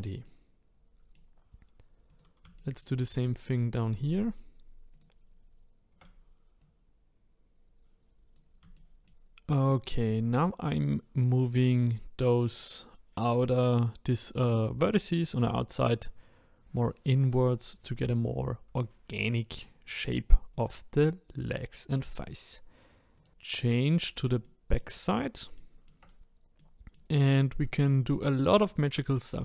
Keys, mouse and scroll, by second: 2.1 click, 2.5 shift+middle click, 3.1-3.8 scroll up 1, 3.8 click, 4.9 shift+click, 6.6 click, 8.7 shift+middle click, 10.0 click, 11.1 click, 14.3 click, 15.2 click, 20.5 click, 21.2 click, 23.1 click, 23.9 scroll down 2, 24.4 middle click, 25.0-25.5 scroll up 1, 25.5 middle click, 26.8-28.6 middle drag, 28.6 click.